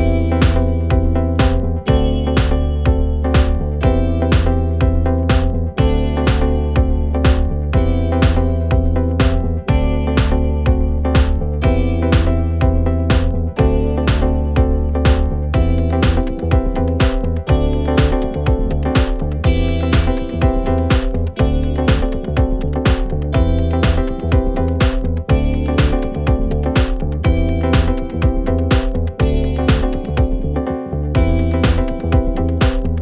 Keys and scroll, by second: 10.1 Delete.